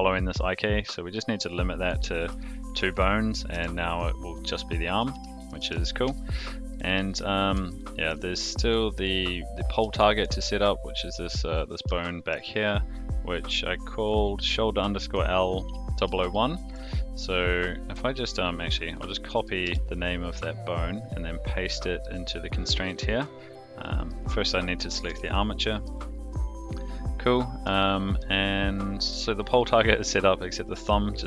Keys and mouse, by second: 1.5 click, 1.8 click, 2.4-2.8 shift+middle drag, 3.5 g, 5.1 alt+r, 5.6 alt+g, 6.1 shift+middle drag, 6.7 middle drag, 7.7-8.1 shift+middle drag, 8.7 click, 10.0 shift+middle drag, 11.0 click, 12.0 shift+middle drag, 16.3-16.7 shift+middle drag, 19.2-20.6 ctrl+drag, 22.2 click, 23.1-24.1 drag, 24.6-25.8 ctrl+drag, 27.8-28.2 shift+middle drag.